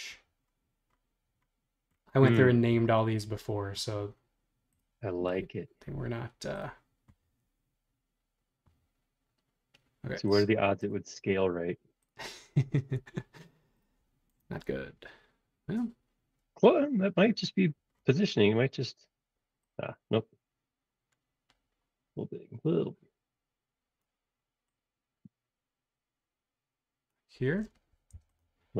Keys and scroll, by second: 28.2 Return.